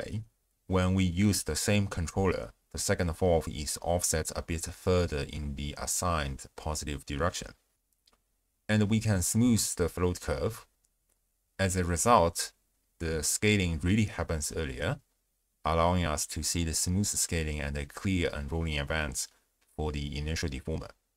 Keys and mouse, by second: 1.2 shift+space, 2.8-4.8 d, 3.1 click, 3.4 click, 3.8 click, 5.4-6.2 drag, 5.4 d, 6.8 click, 7.9 click, 9.4 click, 10.8 click, 12.2 shift+space, 12.7 space, 15.4 space, 16.6 space, 17.2 space, 17.9 space, 19.6-20.0 d, 19.8 click, 20.2 d, 20.6 space.